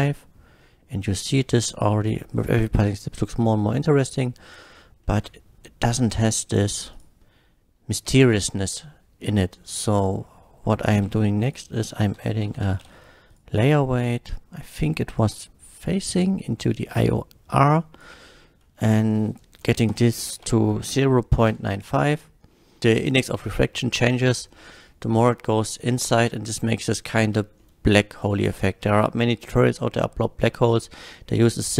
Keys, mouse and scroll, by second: 0.6 shift+middle drag, 1.6-2.0 shift+middle drag, 2.4 shift+click, 3.0 click, 5.1 middle click, 5.2-5.6 scroll up 1, 6.9 click, 9.9 click, 10.8 click, 11.1 shift+a, 11.5 click, 12.2-13.3 typing, 13.3 click, 13.5 click, 14.8-16.9 drag, 17.7 drag, 18.8 click, 19.9 KP_0, 20.1 KP_Decimal, 20.2 KP_9, 20.5 KP_5, 21.5 Return, 22.5 middle click, 27.6 middle click, 28.1 click, 31.0-31.7 drag.